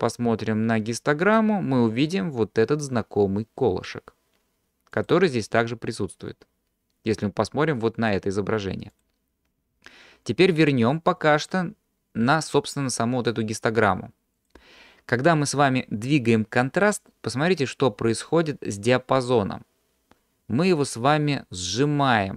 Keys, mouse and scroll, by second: 0.0-1.4 drag, 5.0 click, 9.1-14.5 drag, 16.4-18.7 drag.